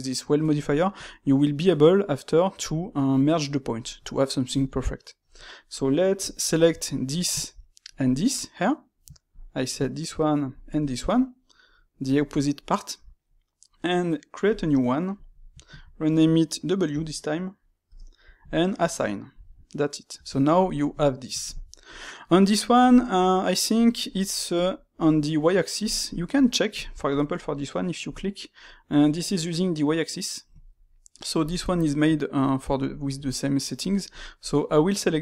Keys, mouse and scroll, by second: 0.6-3.6 shift+middle drag, 4.6-6.8 shift+middle drag, 6.8 alt+click, 9.2 alt+click, 10.4 alt+shift+click, 11.6-14.4 middle drag, 14.4 click, 15.2-18.2 drag, 18.4 click, 19.2-20.0 middle drag, 20.0 Tab, 20.9-24.9 shift+middle drag, 24.9 click, 25.7 click, 26.0-27.9 shift+middle drag, 27.9-31.0 drag, 31.7-34.6 shift+middle drag, 34.6 click, 35.0-35.2 ctrl+middle drag.